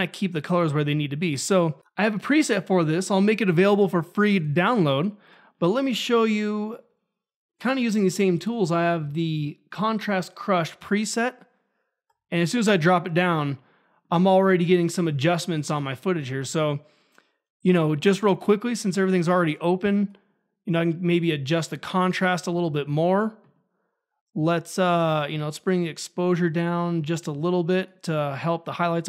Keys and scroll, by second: 8.0-9.0 typing.